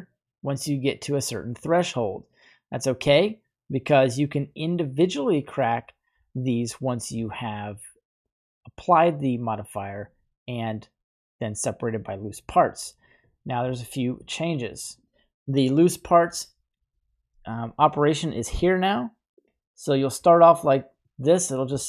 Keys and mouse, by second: 1.0-5.6 drag, 7.5-8.2 middle drag, 15.0 Delete, 19.4 click, 21.2 click.